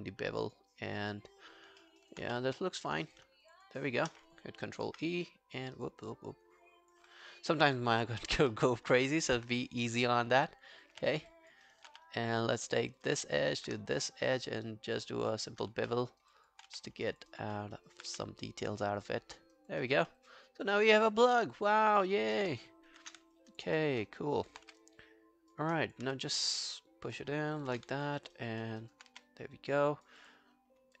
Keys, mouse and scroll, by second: 1.8 alt+middle click, 2.0 alt+right click, 2.3 q, 2.4 right click, 3.5 shift+click, 3.6 shift+click, 4.7 ctrl+e, 5.2 alt+click, 7.9 scroll down 1, 8.0 alt+click, 8.5 alt+middle click, 8.8 alt+right click, 9.0 alt+click, 11.3 alt+click, 11.7 alt+right click, 11.9 q, 13.1 right click, 13.1 double click, 13.4 alt+click, 14.2 shift+click, 14.4 shift+click, 14.7 shift+right click, 15.9 alt+middle click, 16.1 alt+right click, 16.4 alt+click, 16.7 w, 16.9 scroll down 3, 17.1 alt+click, 17.3 alt+right click, 17.6 alt+middle click, 17.8 alt+right click, 18.1 q, 18.3 right click, 19.4 alt+scroll down 1, 19.6 alt+click, 19.8 alt+right click, 20.1 alt+middle click, 20.4 alt+scroll down 1, 20.7 alt+click, 21.0 alt+middle click, 21.4 alt+scroll down 1, 21.9 alt+middle click, 22.2 alt+scroll up 2, 22.9 alt+scroll up 3, 23.4 alt+click, 23.8 alt+middle click, 24.0 alt+right click, 24.4 alt+click, 24.7 w, 24.8 right click, 27.6 ctrl+i, 27.9 scroll down 1, 28.1 alt+click, 28.4 alt+right click, 28.7 alt+middle click, 28.8 alt+right click, 29.1 w, 29.2 right click, 30.5-31.0 scroll down 8.